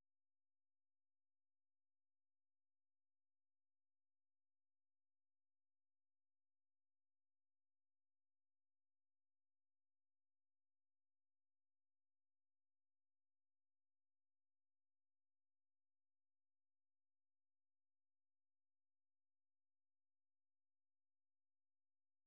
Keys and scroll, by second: 0.6 super+2, 2.9 ctrl+w, 4.1 F6, 5.0-12.7 typing.